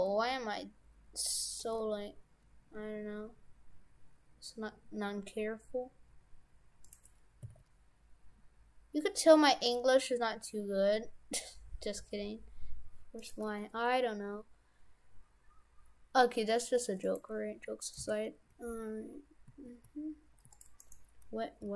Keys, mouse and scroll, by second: 1.7 g, 7.4 s, 13.4 g, 17.8 right click, 18.0 shift+f, 20.8 right click, 21.6 g.